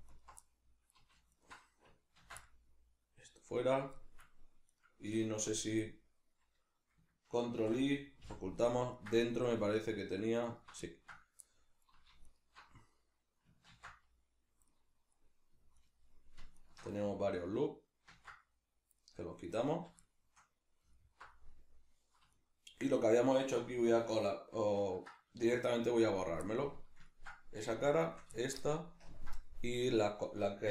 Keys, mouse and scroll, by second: 0.1 alt+right click, 0.4-1.3 middle drag, 1.3 alt+shift+right click, 2.2 ctrl+x, 2.4-4.7 middle drag, 4.7 right click, 5.4 l, 5.9-10.4 middle drag, 7.6 ctrl+i, 9.2 z, 10.4 alt+right click, 10.8-12.2 ctrl+middle drag, 12.2 alt+shift+right click, 13.7 ctrl+x, 14.7-15.8 middle drag, 15.8 alt+right drag, 16.6 alt+shift+right click, 18.1 ctrl+x, 19.0-21.0 middle drag, 19.7 z, 21.3-22.3 middle drag, 22.3 alt+right click, 25.4 3, 26.4-28.0 middle drag, 27.6 3, 28.0 shift+right click, 28.4-30.7 shift+middle drag, 29.0 ctrl+KP_Add.